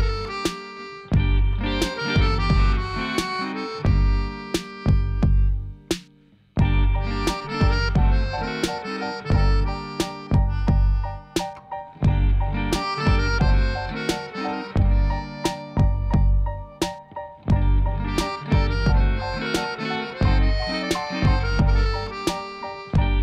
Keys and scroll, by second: 3.5 Tab, 9.1 Tab, 17.8 Tab, 18.4 alt+a.